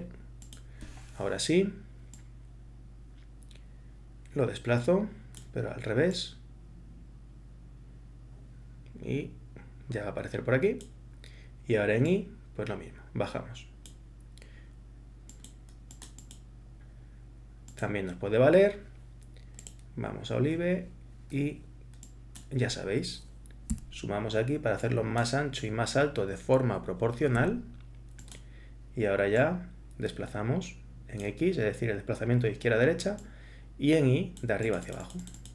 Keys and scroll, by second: 23.7 8, 27.4 7.